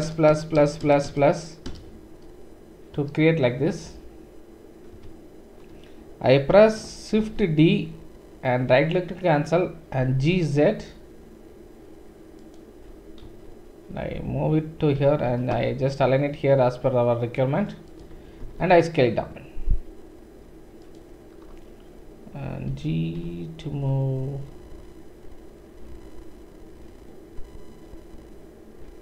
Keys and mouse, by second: 0.0 ctrl+KP_Add, 0.3 ctrl+KP_Add, 0.5 ctrl+KP_Add, 0.8 ctrl+KP_Add, 1.0 ctrl+KP_Add, 1.6 ctrl+KP_Add, 3.0 ctrl+KP_Add, 4.9 ctrl+KP_Subtract, 7.2-8.0 typing, 10.0 g, 13.2 KP_1, 15.0 g, 18.4 s, 22.7 g.